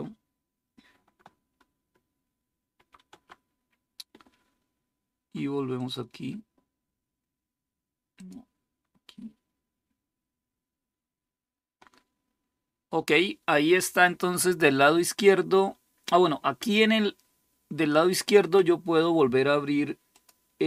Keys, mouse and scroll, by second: 2.5 shift+s, 5.5 click, 7.9-20.6 drag.